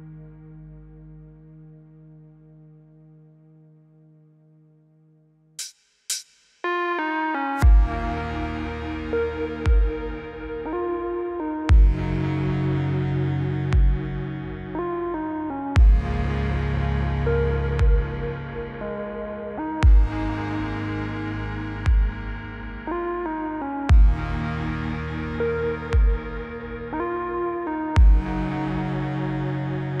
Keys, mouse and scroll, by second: 3.6 click, 5.0 click, 9.0 click, 10.2 ctrl+c, 11.4 click, 12.7-13.1 click, 13.8 ctrl+v, 14.5-15.1 click, 17.2 click, 20.2 click, 23.2-23.7 click, 28.7 click.